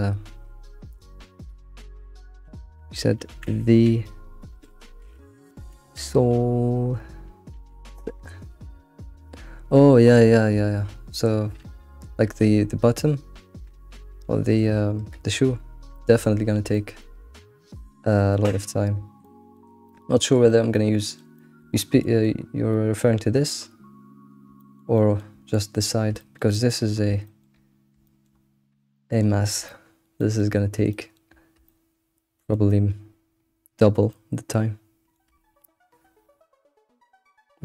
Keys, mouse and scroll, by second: 15.4-15.9 scroll down 2, 15.9-16.3 shift+middle drag, 16.3-16.7 scroll down 3, 16.7-18.7 shift+middle drag, 18.7-19.2 scroll down 7, 19.2-21.7 shift+middle drag, 21.7-22.0 scroll up 4, 22.0-22.3 shift+middle drag, 22.3-22.7 scroll up 3, 22.7-24.3 shift+middle drag, 24.3 scroll down 1, 24.6-26.9 shift+middle drag, 26.9-27.7 scroll up 5, 27.2 shift+middle drag, 28.0 shift+middle drag, 28.3-28.9 scroll up 4, 28.9 shift+middle click, 29.5 scroll down 1, 29.6-30.7 shift+middle drag, 30.7 scroll down 1, 30.9-31.4 shift+middle drag, 31.4 scroll down 2, 31.6-37.6 shift+middle drag.